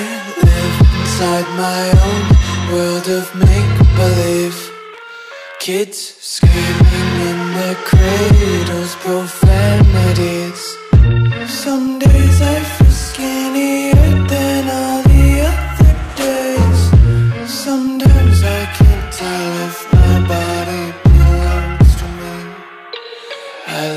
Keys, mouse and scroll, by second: 0.3 ctrl+s, 9.0 click, 19.2 click, 21.9 Delete, 22.7 click.